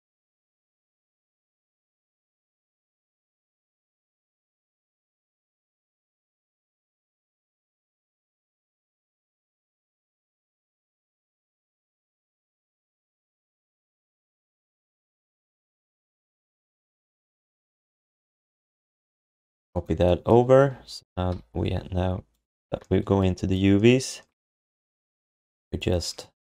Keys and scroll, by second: 8.3-10.1 typing, 14.5 ctrl+shift+d, 16.6 q, 19.0 alt+shift+d, 21.3 u.